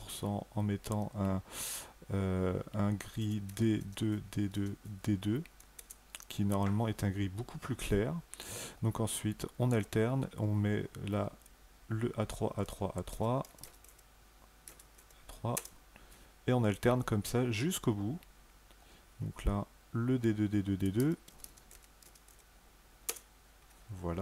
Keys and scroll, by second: 3.0-4.6 typing, 5.6 Return, 12.9-14.8 typing, 15.3 Return, 20.8-22.1 typing, 22.9 Return.